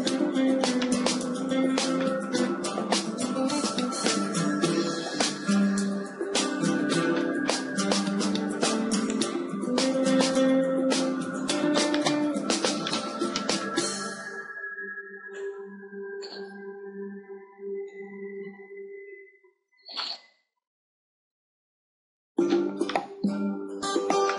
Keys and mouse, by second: 0.7 middle click, 1.3 middle click, 4.7 KP_7, 5.7 middle click, 6.1 z, 7.9 a, 8.1 middle click, 8.1 a, 9.1-11.4 drag, 11.9-15.8 middle drag, 14.9 ctrl+r, 20.8 KP_7, 21.5-24.3 middle drag.